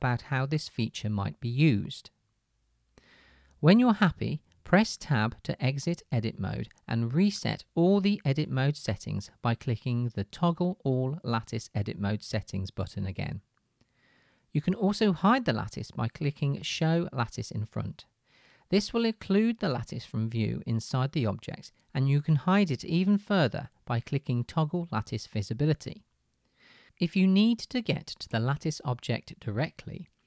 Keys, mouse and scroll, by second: 6.8 Tab, 11.4-17.6 drag, 17.8-25.6 drag.